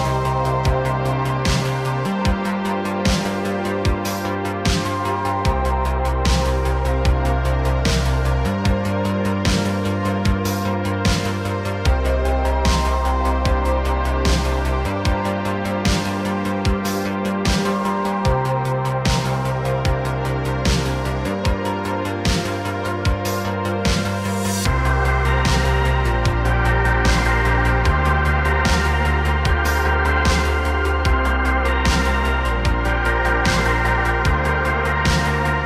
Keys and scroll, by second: 3.1 x, 4.3 x, 5.1 r, 5.4 x, 5.5 x, 7.3 r, 8.2 r, 9.0 x, 16.5 n, 19.8 space, 22.8 space, 26.0 space, 27.7 space, 29.9 space.